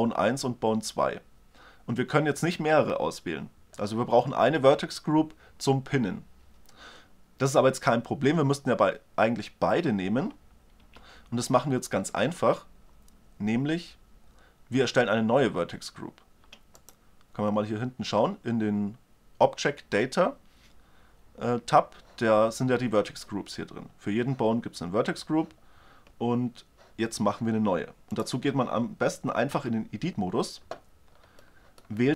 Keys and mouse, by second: 16.3 click, 27.7-29.1 right drag, 29.1 Tab, 31.3 middle click.